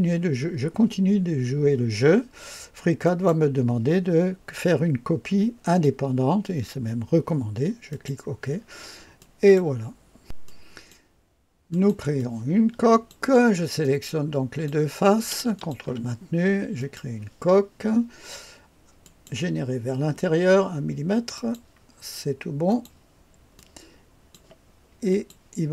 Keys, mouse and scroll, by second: 2.9 click, 7.8 click, 9.1 click, 10.5 click, 11.8 click, 12.2 click, 13.8 click, 15.6 ctrl+click, 16.8 click, 19.0 click, 21.4 click, 22.7 click, 23.6 click, 25.1 click.